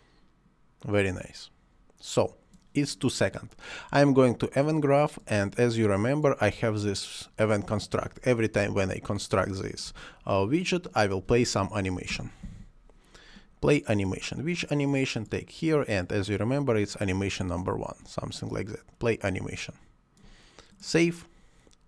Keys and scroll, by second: 8.7 Delete, 9.8 Delete, 12.0 p, 12.4 l, 12.5 a.